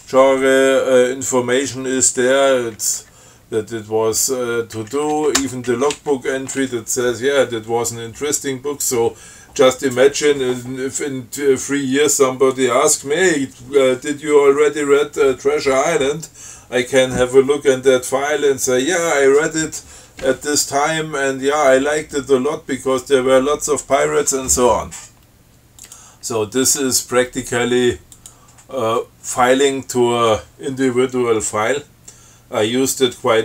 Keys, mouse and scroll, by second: 2.4 Down, 5.0 Down, 5.6 Tab, 5.9 Down, 26.1 click, 28.4 click.